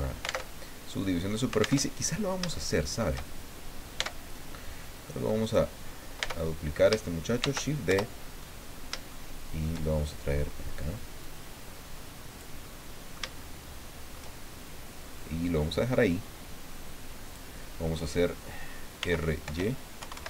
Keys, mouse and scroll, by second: 0.4 alt+Tab, 1.8 alt+Tab, 2.5 shift+middle click, 3.9 Tab, 5.4 right click, 6.2 Tab, 7.4 shift+d, 7.9 shift+Return, 8.4-9.8 shift+middle drag, 11.2-12.6 drag, 12.6 middle click, 15.2-17.5 drag, 19.0-20.2 typing.